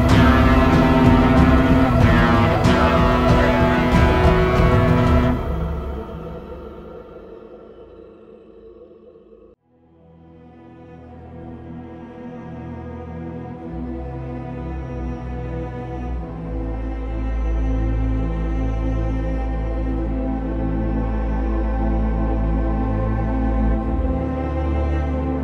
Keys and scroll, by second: 5.1 ctrl+e, 10.2 v, 13.2 ctrl+i, 13.6-14.6 typing, 16.1-17.7 typing, 16.8 ctrl+z, 20.2-20.9 typing.